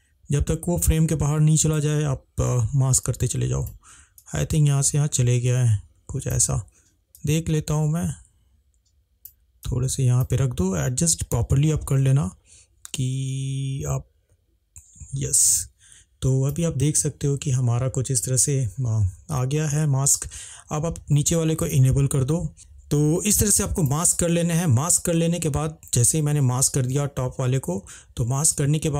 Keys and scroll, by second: 22.5 ctrl+z.